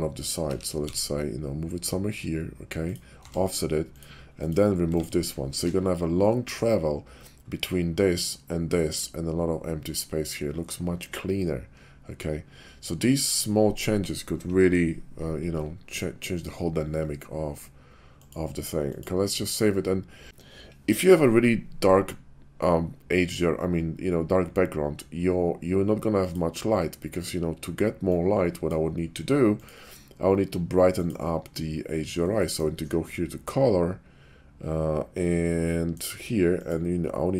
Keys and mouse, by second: 0.3 g, 0.8 x, 2.8 click, 3.1 Tab, 3.8 click, 4.3 click, 4.8 x, 18.1-19.2 drag, 26.2 click, 28.1 click, 29.6-31.0 drag, 32.4 click, 35.7 click.